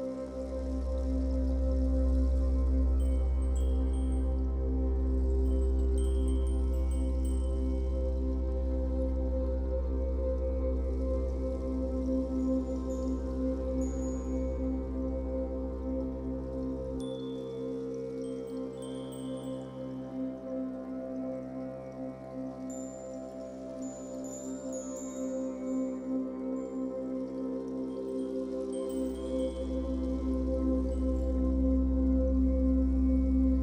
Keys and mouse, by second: 0.2-2.4 drag, 2.2-3.8 typing, 4.0-5.6 alt+shift+drag, 5.6-6.3 alt+middle drag, 6.3 alt+shift+drag, 6.5 alt+shift+middle drag, 6.7-7.8 alt+shift+drag, 7.8 middle click, 8.0-8.6 drag, 9.0 alt+shift+middle drag, 9.3-14.2 alt+shift+drag, 14.4-18.8 alt+drag, 18.8 ctrl+s, 20.4-21.9 drag, 21.9 typing, 22.8-23.7 drag, 23.7 typing, 24.2-27.1 alt+shift+drag, 26.4-27.2 typing, 28.6 typing, 29.7-33.6 drag.